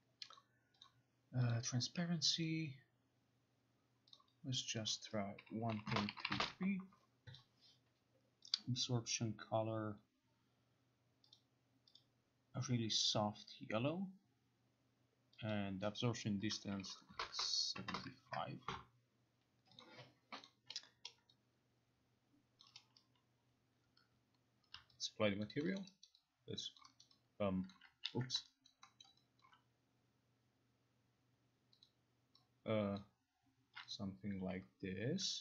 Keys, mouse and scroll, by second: 0.5 click, 1.0 click, 1.6 click, 2.5 click, 4.2 click, 5.0 click, 5.5-6.7 typing, 7.4 click, 8.6 click, 11.4 click, 12.1 click, 13.2 click, 15.6 click, 17.5-18.4 typing, 18.4 Return, 19.9 click, 20.5 click, 22.7 click, 24.8 click, 25.5 alt+click, 25.9 alt+middle click, 26.1 alt+right click, 26.9 alt+click, 27.6 alt+click, 27.8 alt+right click, 28.1 ctrl+z, 29.1 alt+middle click, 29.1 alt+right click, 29.5 alt+click, 29.5 alt+middle click, 31.9 click, 33.1 click, 34.1 click, 34.5 Delete.